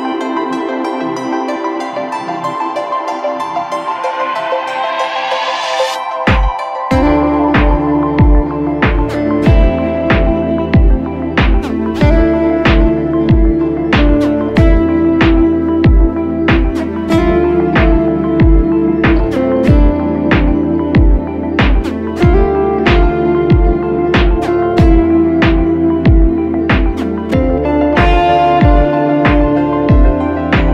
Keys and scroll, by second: 2.6 space, 3.0 space, 3.7 super+-, 3.8 super+-, 4.0 super+-, 4.9 super+=, 5.6 space, 6.0 space, 6.1 space.